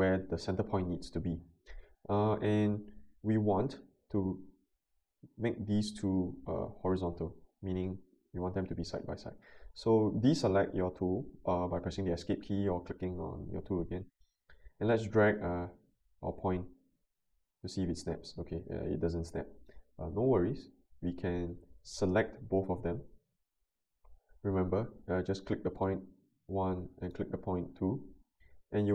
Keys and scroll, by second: 12.1 Escape.